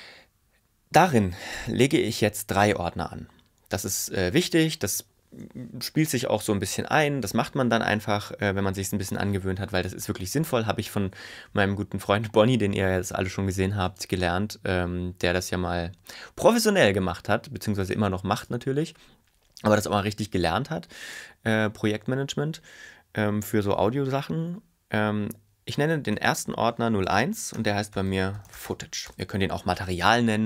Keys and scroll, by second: 26.0 0, 27.2-29.3 typing.